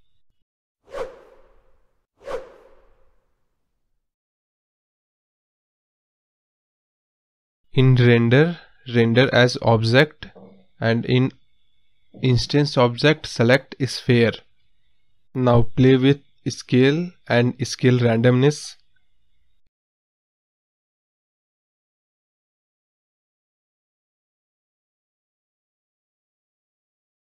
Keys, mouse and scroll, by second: 2.6-3.6 scroll down 4, 4.1-5.6 drag, 6.5-7.9 scroll down 5, 7.9-9.0 drag, 9.0-9.4 scroll down 4, 9.5-11.2 drag, 12.2-13.0 scroll up 4, 13.0 click, 13.6-13.9 scroll down 3, 16.2 scroll down 2, 16.4-16.8 scroll up 3, 19.2 space, 19.9-21.6 drag, 23.1 click, 24.7-25.2 scroll down 1, 25.2 click.